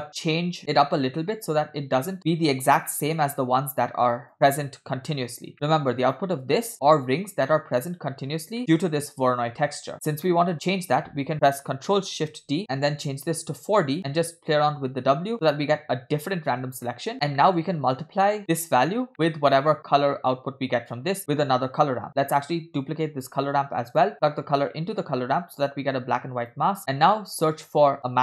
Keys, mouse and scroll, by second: 0.2 scroll up 1, 1.8 scroll down 2, 2.0 middle click, 2.9 middle click, 4.5 click, 5.7 middle click, 5.7 scroll up 2, 6.1 click, 8.8 middle click, 10.2 scroll down 2, 10.3 middle click, 10.5 scroll up 1, 11.5 click, 12.4 ctrl+shift+d, 12.6 middle click, 12.6 scroll up 1, 13.0-14.0 drag, 14.6 middle click, 15.3 click, 16.7 scroll down 2, 16.9 middle click, 17.4 middle click, 18.3 scroll down 1, 18.4 middle click, 18.4 scroll up 2, 19.2 scroll down 1, 19.5 middle click, 19.8 scroll up 2, 21.3 click, 23.2 shift+d, 24.8-26.7 drag, 26.9 scroll down 4, 26.9 middle click, 27.3 scroll up 2, 27.9 shift+a.